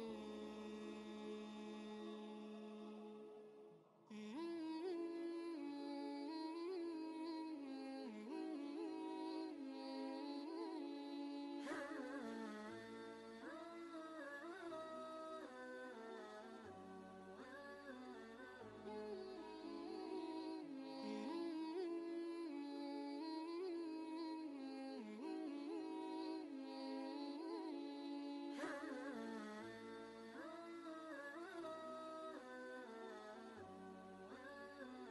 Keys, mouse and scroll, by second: 0.1 ctrl+v, 0.7 ctrl+space, 0.8 ctrl+click, 2.1-4.6 drag, 6.0 ctrl+space, 6.1 ctrl+click, 6.8 space, 6.9 click, 7.3 space, 7.9 click, 11.9 ctrl+shift+g, 13.0 y, 13.7 click, 16.3 v, 17.4-20.3 drag, 20.3 ctrl+space, 20.6 ctrl+click, 20.8 ctrl+space, 23.0-27.6 drag, 27.6 ctrl+g, 28.0 ctrl+space, 28.2-30.5 ctrl+drag, 30.9 ctrl+space, 31.1 ctrl+click, 31.4 ctrl+space, 32.5-35.1 shift+drag.